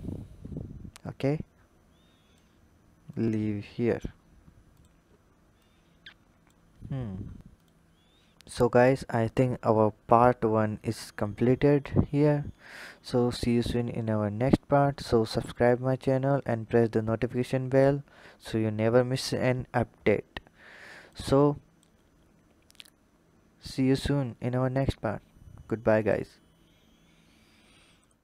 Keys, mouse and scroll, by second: 0.9 click, 2.9 click, 3.5-4.5 scroll down 9, 4.5 drag, 5.4 click, 6.5-7.4 scroll down 1, 7.4 click, 7.8-8.7 scroll down 2, 8.7 click, 10.1-11.7 drag, 16.8-19.8 drag, 20.9 click, 23.8-26.9 drag, 27.8 click.